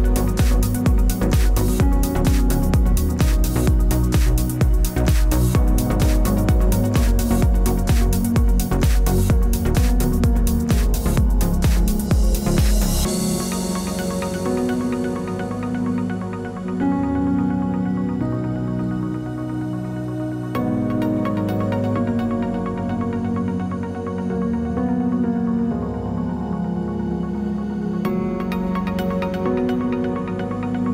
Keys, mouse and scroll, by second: 0.0 click, 0.8-1.1 scroll up 5, 1.1 KP_0, 2.4 click, 4.2 click, 5.2 click, 6.1 click, 7.0 click, 8.5 click, 9.7 click, 10.7 click, 12.1 click, 13.2-13.5 scroll up 4, 13.5-14.2 scroll down 2, 14.7 shift+a, 15.6 middle click, 15.8-16.3 scroll down 6, 16.3 click, 17.2 click, 17.6 click, 18.6 shift+d, 19.1 click, 21.0 click, 21.2 ctrl+z, 21.4 click, 22.1 click, 22.8 click, 23.4 middle click, 24.0 click, 24.5 click, 25.1 KP_0, 25.9 click, 26.7-27.3 scroll down 5, 26.9 middle click, 27.6 click, 28.1 shift+d, 28.5 click, 29.8 click, 30.0 click, 30.4 KP_0, 30.8 click.